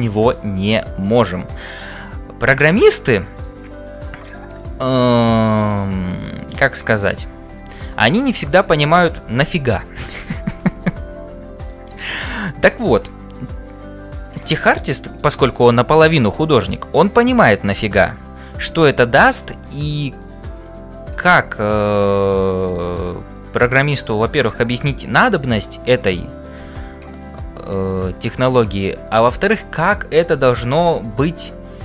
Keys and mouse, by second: 1.0 click, 1.7-3.5 middle drag, 4.1 shift+middle click, 4.8-7.0 middle drag, 7.6 shift+middle click, 8.4 click, 14.0 click, 14.5 middle click, 17.8 click, 21.2 f, 21.8 click, 22.7 f, 23.8 click, 26.7 f.